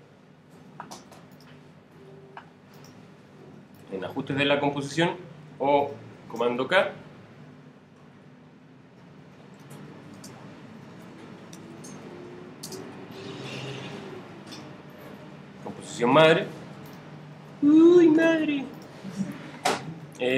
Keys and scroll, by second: 10.7-14.2 typing.